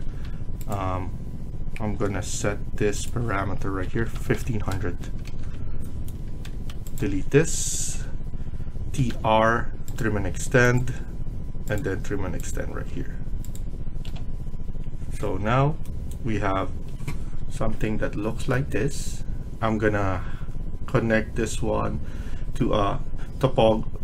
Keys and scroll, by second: 3.5-4.5 typing, 4.6 Return, 4.9 Escape, 5.1 Escape, 5.4 Escape, 6.1 Escape, 6.4 Escape, 7.8 Delete, 8.7-9.4 typing, 12.6 Escape, 12.9 Escape, 13.9 Delete.